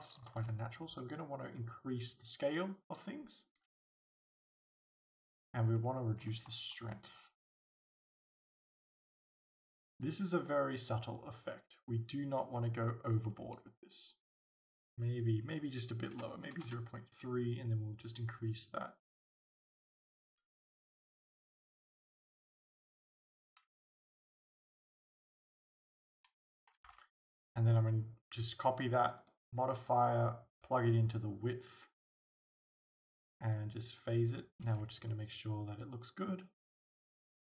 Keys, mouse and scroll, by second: 0.3 alt+a, 3.9 alt+a, 16.8 Return, 24.8 scroll down 1, 25.5 scroll up 1, 26.0 scroll up 1, 26.9 alt+a, 29.2 click, 34.7 alt+a, 34.7-37.4 drag.